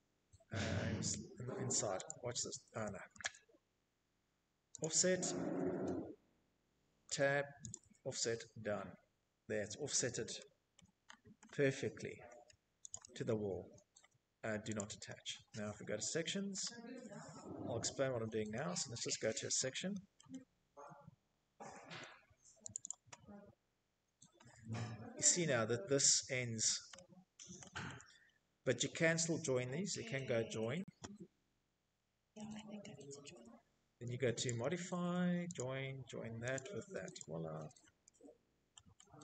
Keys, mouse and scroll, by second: 2.5 click, 2.5 z, 3.3 click, 5.5 Tab, 6.8 scroll, 7.7 scroll, 8.3-9.0 scroll, 10.3 Escape, 11.4 middle click, 11.5 click, 13.2 click, 13.7 middle click, 13.8 scroll, 14.3 Escape, 14.6 Escape, 14.7-15.4 scroll, 15.6 Escape, 16.4 middle click, 16.8 Escape, 17.0 middle click, 17.1 middle click, 18.0 middle click, 18.2 Escape, 18.6 middle click, 18.8 middle click, 19.0 middle click, 19.2 middle click, 19.8 middle click, 19.9 middle click, 20.2 middle click, 20.3 middle click, 21.2 click, 21.3 click, 22.6 Escape, 22.6-23.5 scroll, 23.5 Escape, 23.9 scroll, 25.1-25.5 scroll, 25.5 middle click, 25.6 right click, 25.8-27.3 scroll, 27.1 Escape, 27.6 click, 29.9 Escape, 30.9 j, 32.0 Escape, 32.9 click, 34.0 click, 35.0 click, 35.6 click, 36.0 Escape, 36.2-36.6 scroll, 36.6 middle click, 37.4 middle click, 38.1 middle click, 38.2-39.0 scroll, 38.3 Escape, 39.0 Escape.